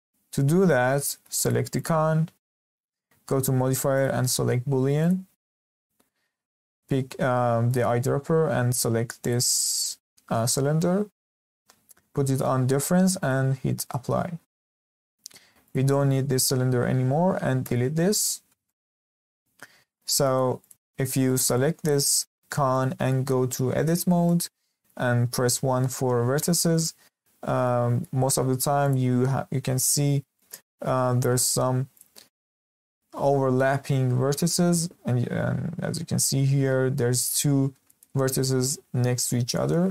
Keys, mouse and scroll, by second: 0.8 scroll up 1, 1.0-1.4 shift+middle drag, 1.4 click, 1.7 click, 3.9-7.0 drag, 7.6 click, 13.1-14.5 drag, 14.5-14.9 shift+middle drag, 14.9 click, 15.6 click, 17.6 Delete, 18.7-19.4 shift+middle drag, 19.4-19.9 scroll up 2, 19.9-20.6 shift+middle drag, 20.6 click, 21.0 scroll up 1, 21.3-22.4 shift+middle drag, 22.4 scroll up 2, 22.7-23.8 shift+middle drag, 23.8 Tab, 24.2-25.5 middle drag, 25.5 1, 27.2-27.6 scroll up 1, 27.6 shift+middle click, 28.8 click, 29.7 click, 30.3 click, 31.9 click, 32.6 click, 33.1 g.